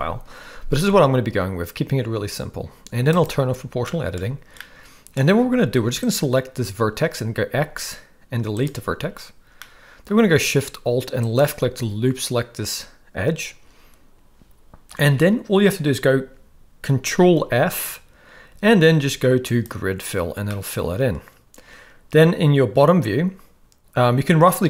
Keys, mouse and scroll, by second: 3.1 click, 3.9 shift+middle drag, 4.5-5.1 middle drag, 5.4 alt+a, 6.0 click, 7.4 x, 9.6 middle click, 17.3 ctrl+f, 20.4-24.6 middle drag.